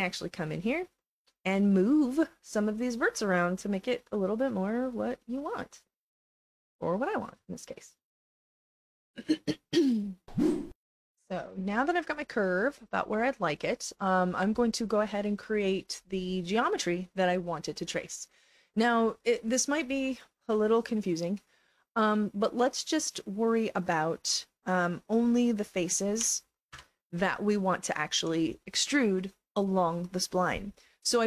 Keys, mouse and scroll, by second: 1.8 click, 2.9 click, 3.6 click, 4.5-5.7 drag, 6.0 click, 6.8 click, 7.8 click, 8.6 click, 9.7 click, 10.7 alt+middle click, 11.0-12.0 alt+drag, 12.3 alt+click, 19.1 click, 20.6-24.1 alt+drag, 24.3 right click, 25.3 click, 25.7 alt+click, 27.5 alt+click.